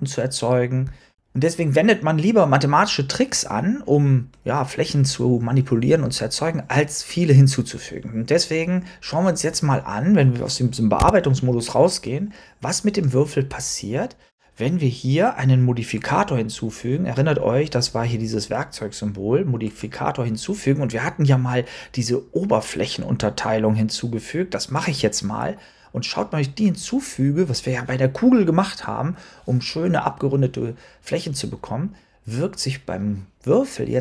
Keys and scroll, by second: 10.9 Tab.